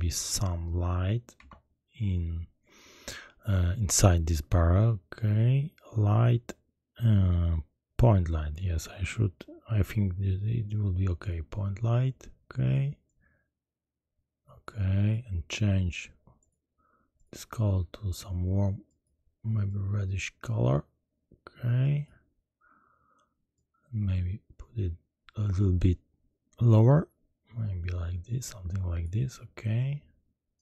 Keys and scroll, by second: 1.3 shift+a.